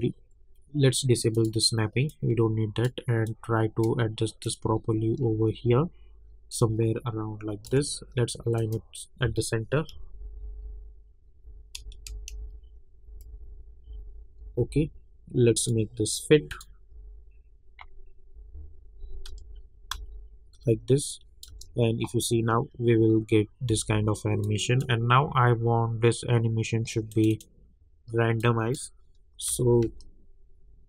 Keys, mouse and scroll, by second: 1.3-8.5 drag, 9.9 Down, 11.8 Left, 14.4 Down, 15.6 click, 16.9 Down, 19.2 s, 19.9 s, 21.1 click, 21.5 space, 23.8 space, 24.4-29.5 drag, 29.5 space.